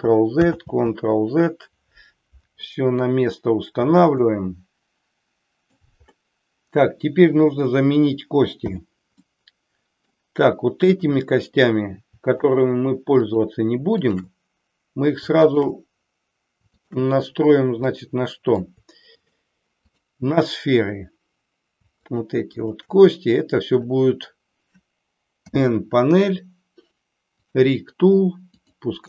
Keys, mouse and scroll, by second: 0.6 ctrl+z, 4.2-5.9 middle drag, 8.6 n, 9.3-10.1 middle drag, 10.9-11.6 drag, 12.3-12.9 shift+drag, 13.3-14.6 shift+drag, 15.5-16.1 shift+drag, 16.7-17.4 shift+drag, 17.9-18.6 middle drag, 19.3-20.0 shift+drag, 22.0-22.6 shift+drag, 25.4 n, 28.5-29.0 drag.